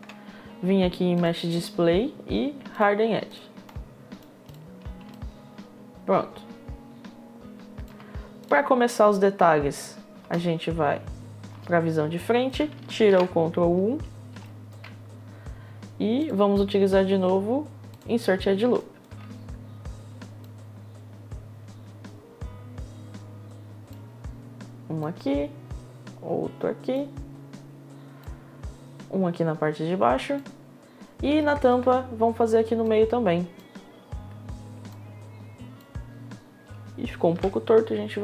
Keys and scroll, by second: 9.8 space, 11.1 space, 13.1 1, 14.3 1, 37.1 w.